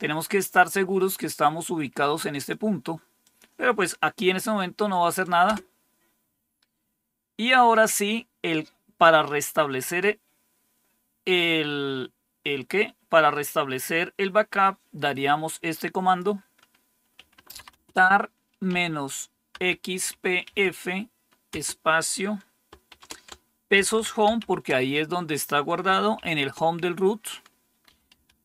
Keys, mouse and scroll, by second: 1.5-2.5 drag, 3.2 click, 5.4 Return, 16.0 click, 16.9-20.4 typing, 21.4 typing, 22.8-24.8 typing, 26.1 typing, 27.8-28.4 typing.